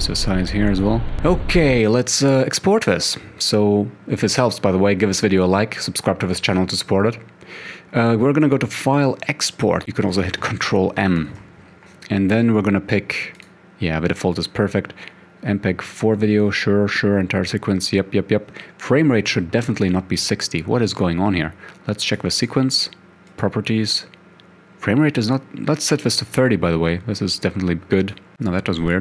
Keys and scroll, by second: 1.1 Home, 11.2 ctrl+m.